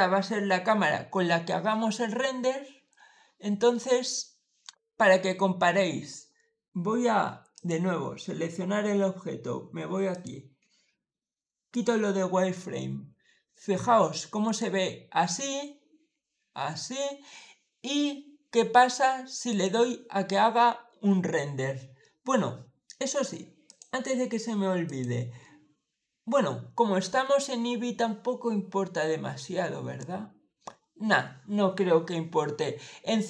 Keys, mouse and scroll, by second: 7.4 click, 10.0 click, 11.6 click, 14.3 click, 16.0 middle click, 16.4 middle click, 19.4 click, 23.5 click, 24.7 click, 27.6-28.7 middle drag.